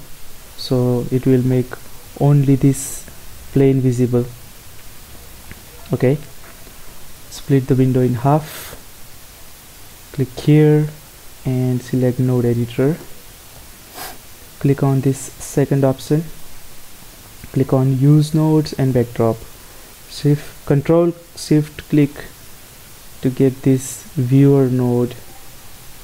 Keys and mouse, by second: 7.6-9.5 drag, 9.9-11.7 drag, 13.7 n, 16.5-20.7 drag, 22.2-26.0 drag.